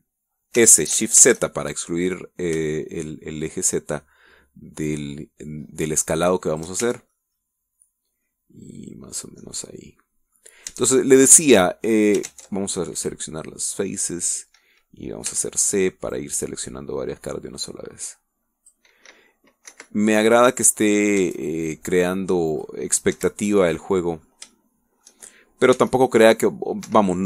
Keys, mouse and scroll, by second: 1.5 s, 7.5 shift+click, 7.8 shift+Tab, 8.1-11.5 shift+middle drag, 11.7 Tab, 12.5 middle click, 14.0 click, 14.4 middle click, 16.3 c, 17.1-19.9 drag, 20.7 F1, 20.9 middle click, 23.5 click, 24.1 Escape, 24.5 middle click, 25.5 shift+middle click, 26.7 c.